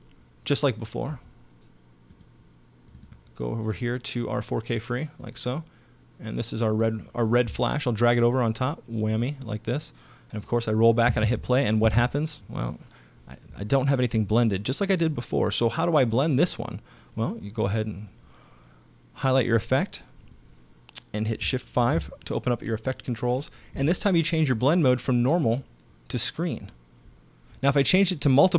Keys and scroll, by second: 11.1 space, 21.8 shift+5.